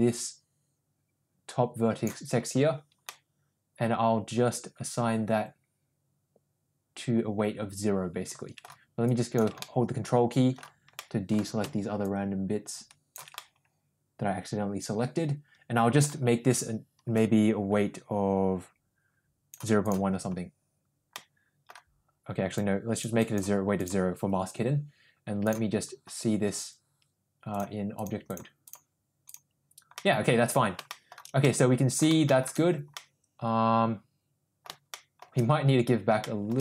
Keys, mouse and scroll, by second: 3.1-8.6 middle drag, 9.1 ctrl+click, 9.6 middle click, 11.0 middle click, 12.0-13.3 ctrl+drag, 13.4-16.0 middle drag, 17.2-19.5 drag, 19.8 click, 21.1 middle click, 22.6 click, 25.5 click, 27.6 click, 28.0 click, 28.4 click, 30.0 middle click, 30.9 shift+middle drag, 31.5-32.0 middle drag, 32.3 shift+middle click, 33.0-34.7 middle drag, 34.9 shift+middle drag, 36.2 shift+middle drag.